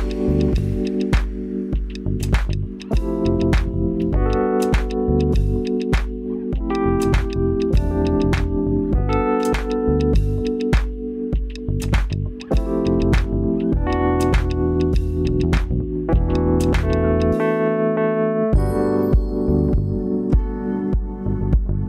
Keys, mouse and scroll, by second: 0.7 click, 1.4 g, 1.7 z, 4.5 click, 5.1 Tab, 5.8-7.3 middle drag, 7.3-9.0 drag, 9.3 Tab, 9.6 Tab, 10.2 click, 10.8 g, 11.1 z, 13.4 click, 14.0 Tab, 14.8-17.4 middle drag.